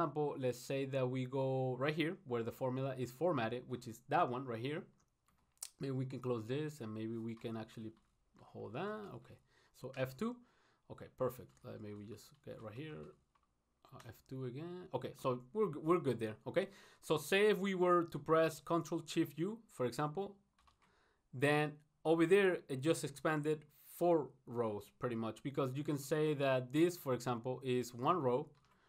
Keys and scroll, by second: 6.4 ctrl+shift+u.